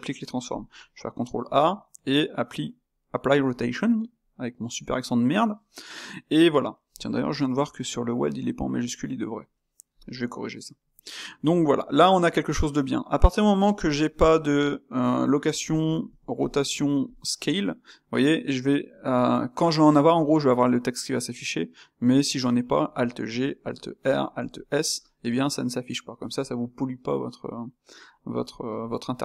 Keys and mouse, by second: 3.5 ctrl+a, 11.1-14.1 middle drag, 14.1 g, 15.8 r, 16.5 s, 22.7 alt+g, 23.5 alt+r, 24.3 alt+s, 28.4-29.2 middle drag.